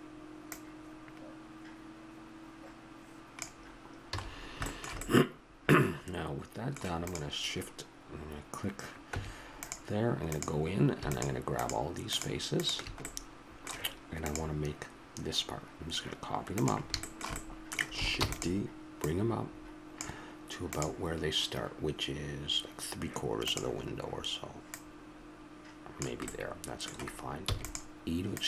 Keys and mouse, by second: 4.1 a, 4.2-5.8 middle drag, 6.0-7.0 middle drag, 7.0-8.9 right drag, 9.1 Tab, 13.1-14.3 middle drag, 17.0-18.2 middle drag, 18.2 shift+d, 18.9-19.9 drag, 24.6-26.3 drag, 26.3-28.3 middle drag, 27.4 e, 28.3-28.4 drag.